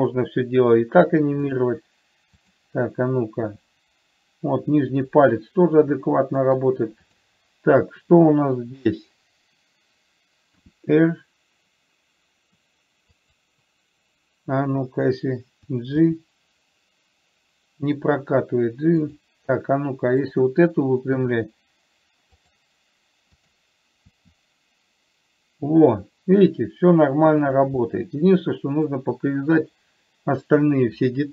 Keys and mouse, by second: 3.9 r, 6.4 middle click, 7.4 click, 11.0 r, 16.4 g, 21.4 r, 23.7 click, 24.5 r, 28.0-29.2 middle drag.